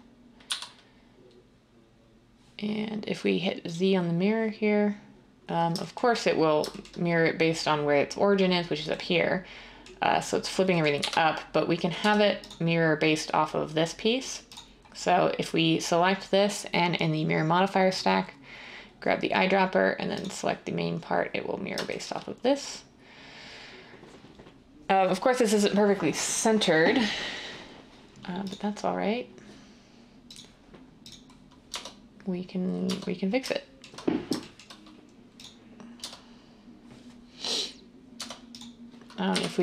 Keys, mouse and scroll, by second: 0.4 z, 10.9 1, 12.0 Tab, 31.6 Tab, 32.8 Tab, 36.0 Tab, 38.1 Tab, 39.2-39.6 typing.